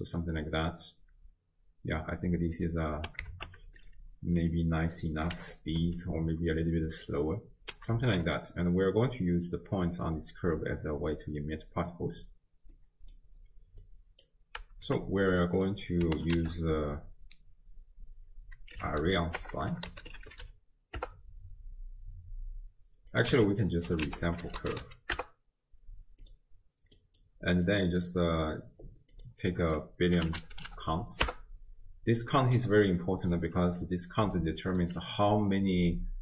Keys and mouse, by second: 3.0 space, 3.8-5.5 drag, 5.8 space, 7.6 space, 12.8 click, 12.8 middle click, 12.8 right click, 13.8-14.3 drag, 14.9 g, 15.6 click, 16.4 ctrl+a, 18.9 r, 19.6 BackSpace, 19.7 BackSpace, 20.3 r, 23.4 x, 24.1 ctrl+a, 27.0 click, 27.7 click, 29.1-31.3 drag, 30.6 0, 30.7 0, 32.3 middle click, 33.0 middle click, 33.9 d, 34.1 click, 34.8 d.